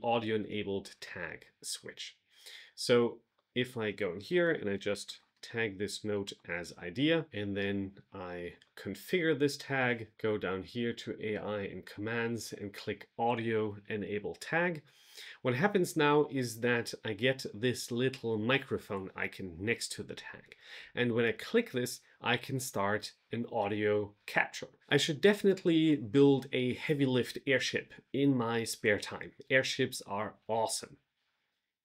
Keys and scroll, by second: 4.6 shift+3, 6.1 Return.